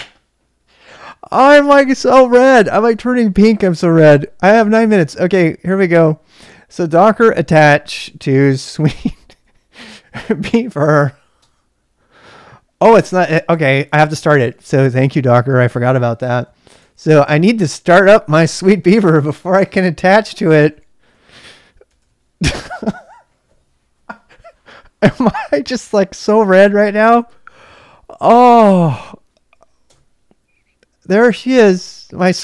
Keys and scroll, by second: 7.7-11.7 typing, 11.3 Return, 14.8 Return, 14.8 typing, 16.4 [, 17.0 k, 19.7-23.0 typing, 29.8 Return.